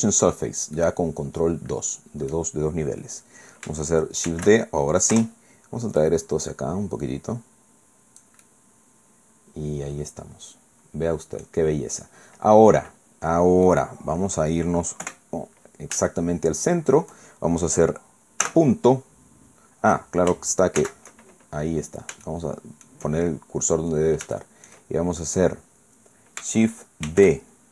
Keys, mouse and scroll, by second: 0.3 scroll down 2, 0.8-2.5 drag, 4.3 shift+d, 5.1 Return, 6.0-8.4 drag, 8.5-11.7 drag, 12.0 scroll down 2, 12.7-13.9 drag, 15.1 KP_1, 16.1-17.1 shift+drag, 18.5 ., 20.8 shift+c, 21.4 shift+middle click, 22.3 shift+click, 22.9 shift+scroll up 2, 23.9-24.2 scroll down 2, 24.3 shift+click, 25.3 scroll up 2, 27.1 shift+d.